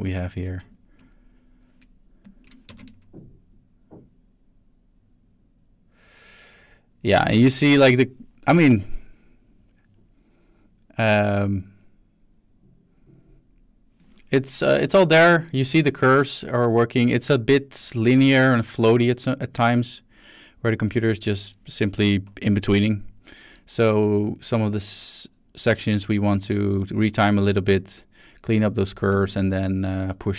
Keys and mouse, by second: 0.7 click, 2.2 click, 2.7 space, 29.1 space, 29.6-30.3 drag.